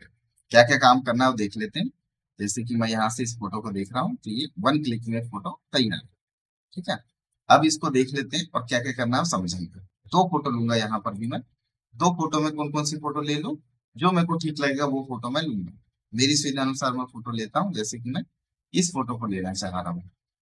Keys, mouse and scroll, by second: 2.8 click, 10.1 click.